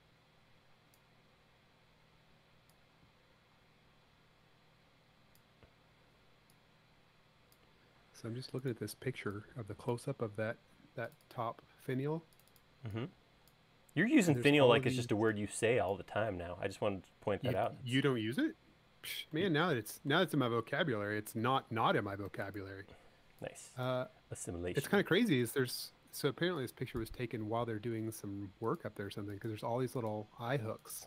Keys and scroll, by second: 8.3 space, 23.3 e, 26.2 space, 30.8 space.